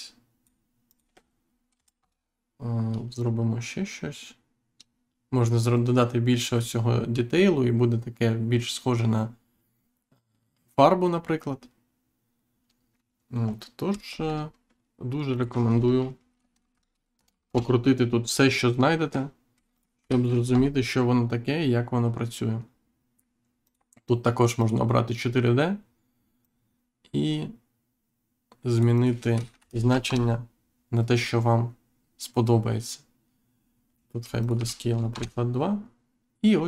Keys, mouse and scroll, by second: 1.9 Return, 3.1 click, 15.3 click, 16.7 6, 17.1 BackSpace, 17.2 5, 17.4 Return, 19.7 click, 19.9 2, 20.4 Return, 23.6 click, 24.5 click, 26.3 click, 30.0 Return, 34.3 click, 34.5 2, 35.0 Return.